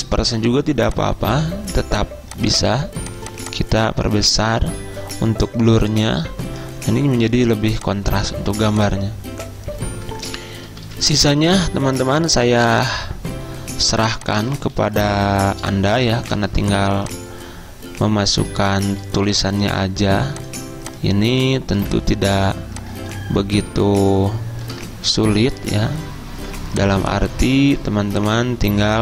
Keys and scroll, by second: 10.9 z, 14.8 z, 16.2 i, 19.3 d, 21.8 v, 25.2 ctrl+d, 26.4 ctrl+d, 28.1 z.